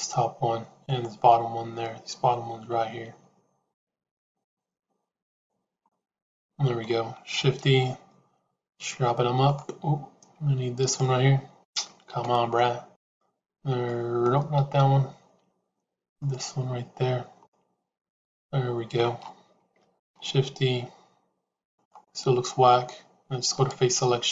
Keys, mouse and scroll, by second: 3.7 shift+click, 5.8-6.8 middle drag, 7.5 shift+e, 12.0 ctrl+z, 13.7 middle click, 14.5 ctrl+z, 17.4-18.9 middle drag, 19.8 shift+e, 23.5 click.